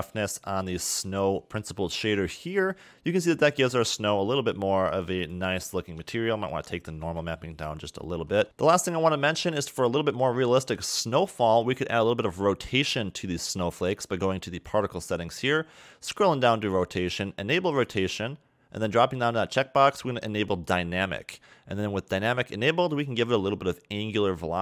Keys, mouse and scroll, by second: 2.7-4.4 scroll down 2, 4.4 scroll up 2, 5.2 click, 7.8-8.2 scroll down 1, 8.2 a, 8.4 a, 8.5 middle click, 9.7 click, 13.0 click, 14.7 click, 15.5-16.4 scroll down 10, 17.1 click, 17.9 click, 18.6 scroll down 3, 19.4 scroll down 1, 20.9 click, 22.3 scroll down 1, 23.1 click.